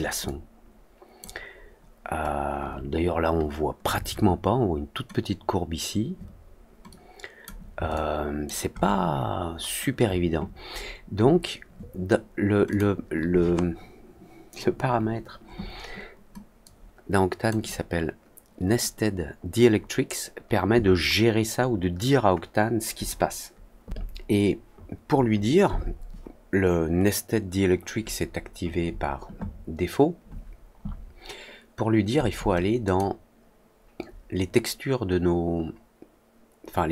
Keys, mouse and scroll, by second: 0.2-1.1 alt+drag, 6.8 click, 7.9-8.4 alt+drag, 8.7 alt+middle click, 9.0 alt+middle click, 9.5 alt+middle click, 10.7 middle click, 11.1 middle click, 12.6 click, 16.6 click, 32.8 click.